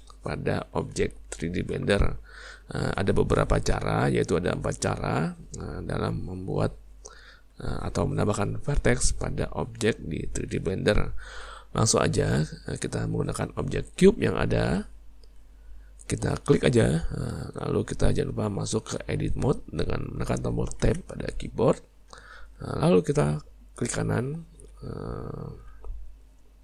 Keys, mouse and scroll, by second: 16.7 click, 20.9 Tab, 26.3 right click.